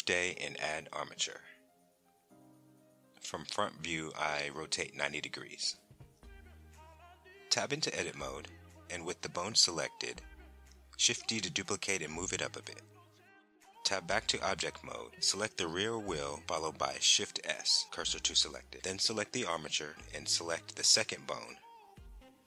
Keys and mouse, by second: 0.7 shift+a, 4.4 r, 4.6 KP_9, 4.8 KP_0, 5.5 KP_Enter, 6.5 Tab, 9.8 shift+d, 10.7 click, 13.5 Tab, 14.3 click, 16.1 shift+s, 18.8 Tab, 20.5 KP_7, 22.0 r, 22.3 KP_Subtract.